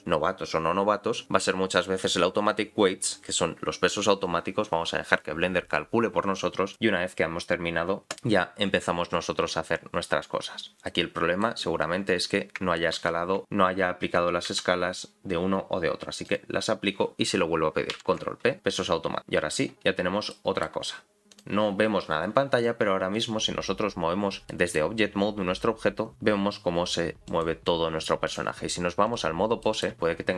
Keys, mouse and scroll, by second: 9.6-10.9 scroll down 7, 10.9 middle click, 10.9 scroll down 4, 11.8-12.6 scroll up 2, 12.6-13.0 scroll up 3, 13.0 ctrl+z, 13.4 middle click, 14.5 ctrl+a, 19.7-20.3 scroll up 2, 20.3 middle click, 20.3 scroll up 2, 21.3 click, 22.6 click, 23.1 click, 24.5 middle click, 24.9-25.5 scroll down 2, 25.5 g, 28.3 click, 29.6 middle click, 29.9 click.